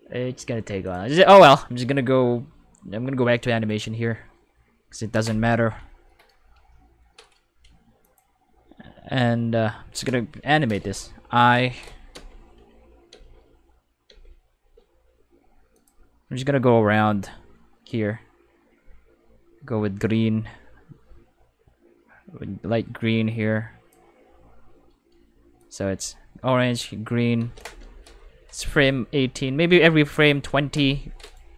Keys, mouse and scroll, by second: 0.8 click, 3.6 click, 8.0 click, 10.8 5, 12.1 space, 13.1 space, 14.1 space, 14.5 space, 15.7 click, 17.8-23.9 drag, 25.6 click, 25.9 space, 27.3 space, 31.2 right click.